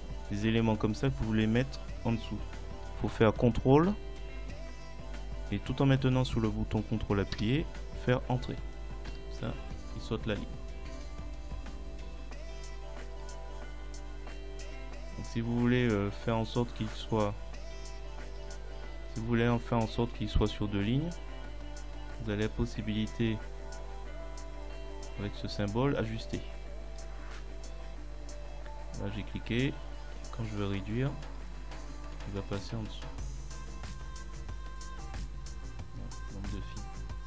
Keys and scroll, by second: 7.4 ctrl+Return, 9.1 Return.